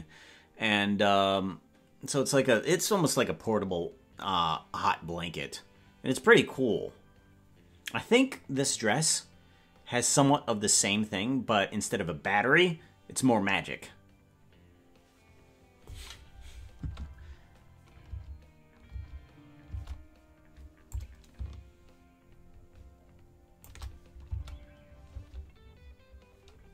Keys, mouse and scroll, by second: 18.2 space, 19.8 space, 20.9-23.7 drag, 24.3 space, 25.2 space.